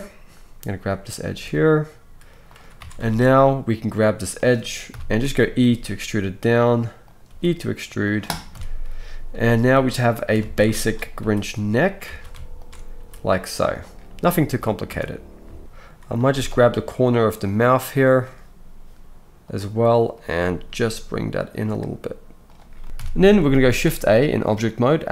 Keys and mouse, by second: 1.4 g, 2.8 alt+a, 3.0-10.8 alt+shift+middle drag, 4.9 KP_3, 5.7 e, 7.3 e, 8.5 KP_1, 9.6 g, 10.4 alt+a, 10.8 alt+shift+click, 10.9 alt+shift+middle click, 11.2 g, 12.1 alt+a, 12.6 alt+shift+click, 12.9 g, 14.9 Tab, 15.9-18.4 middle drag, 16.3 Tab, 18.4-20.2 drag, 20.2-23.5 middle drag, 20.8 g, 22.8 x, 22.9 KP_1, 23.7 shift+a.